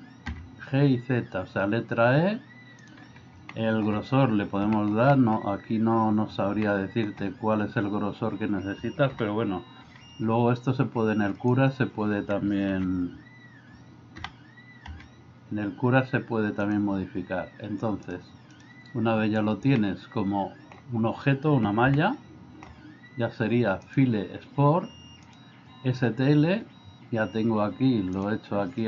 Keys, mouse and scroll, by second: 0.7 g, 3.6 shift+middle click, 4.8 shift+middle click, 5.1 middle click, 6.6 shift+middle click, 9.2 g, 12.8 ctrl+z, 14.3 g, 18.1 click, 19.8-20.8 middle drag, 21.9-22.7 shift+middle drag, 24.0-26.9 drag.